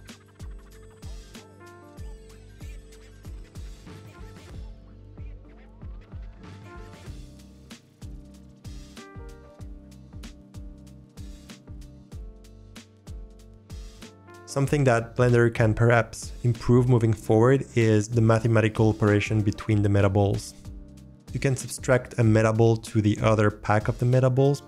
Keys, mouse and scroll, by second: 0.1 click, 0.2 g, 0.7 middle click, 0.8 click, 1.4 n, 1.4 click, 1.8 n, 2.1-2.6 scroll up 4, 2.2 middle click, 2.4 n, 2.8 ctrl+z, 2.8 click, 3.1 middle click, 3.4 g, 3.7 scroll up 2, 3.8 click, 4.0 g, 4.4 click, 4.4 middle click, 4.5 alt+click, 4.6 middle click, 4.8 middle click, 5.0 middle click, 5.0 g, 5.4 click, 5.4 middle click, 5.4 g, 6.1 click, 6.1 middle click, 6.3 click, 6.5 g, 6.9 click, 7.1 s, 7.4 click, 7.5 g, 7.7 click, 8.0 g, 8.2 middle click, 8.2 click, 9.2 click, 9.3 g, 9.6 click, 10.1 click, 10.1 middle click, 10.3 scroll up 1, 10.5 g, 10.6 drag, 11.0 scroll down 3, 11.2 click, 11.2 g, 11.4-12.4 click, 11.8 g, 12.2 click, 12.5 s, 12.8 click, 12.8 middle click, 13.3 middle click, 13.4 scroll up 2, 13.5 click, 13.5 shift+middle click.